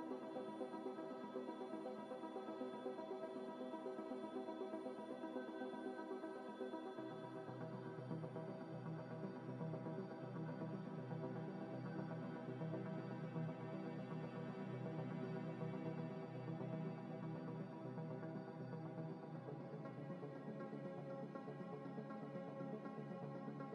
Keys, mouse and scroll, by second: 0.0 a, 2.5 u, 3.1 scroll down 1, 3.6 a, 3.8 f, 4.4 ctrl+z, 5.1 g, 5.3 y, 5.6 x, 6.2 scroll up 1, 6.6 s, 6.8 y, 7.9 s, 8.3 g, 9.4-13.7 typing, 14.5 Tab, 15.4 z, 16.4 Tab, 16.4 Tab, 17.1 Tab, 17.5 Tab, 19.0 double click, 19.6 middle click, 20.4 double click, 21.4 double click, 21.4 Tab, 21.7 Tab, 21.8 Tab, 22.1 double click, 22.5 Tab, 23.0 3.